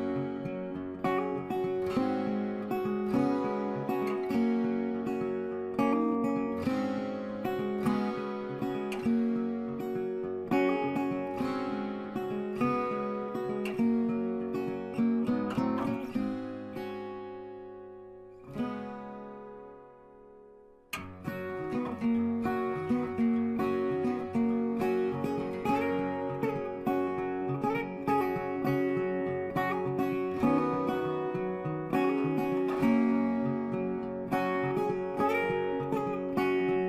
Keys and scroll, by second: 20.9 ctrl+g.